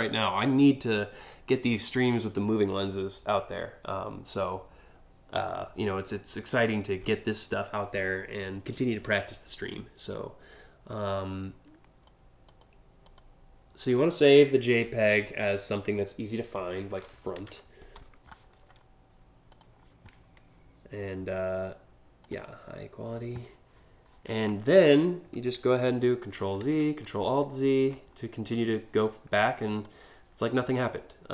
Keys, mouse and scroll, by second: 12.1 click, 12.7 click, 16.2-17.5 typing, 19.1 click, 21.8 click, 26.0 ctrl+z, 29.4 click, 30.1 scroll up 1.